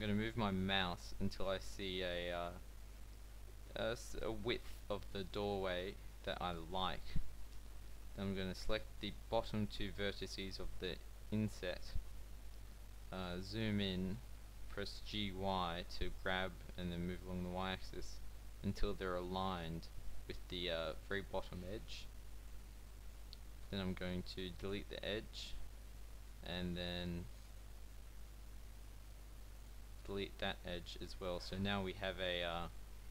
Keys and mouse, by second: 7.1 a, 7.6-9.9 drag, 14.7 g, 19.4-20.9 middle drag, 23.6 x, 29.1 x, 30.5 a, 31.2 a.